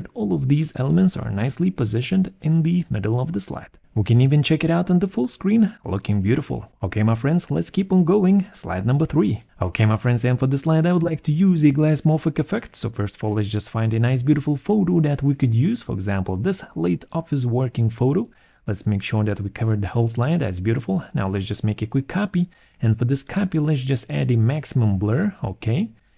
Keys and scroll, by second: 5.2 shift+F5, 6.9 Escape, 9.3 Return, 11.2 alt+2, 12.9-14.1 typing, 17.3 alt+1.